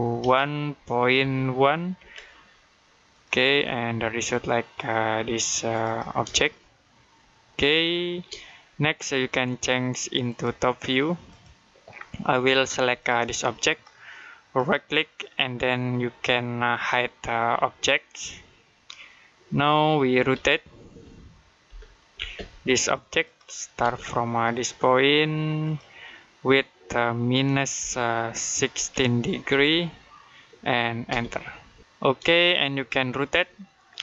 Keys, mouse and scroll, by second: 0.0 typing, 1.6-2.3 typing, 3.0 click, 5.6 click, 6.3 shift+middle click, 10.1 click, 11.8 scroll down 1, 12.0 middle click, 12.8 click, 14.4 right click, 18.0 click, 20.2 typing, 21.5-22.0 typing, 22.6 click, 23.7 space, 25.5 click, 27.6-29.4 typing, 30.9-32.3 typing, 32.3 shift+middle click.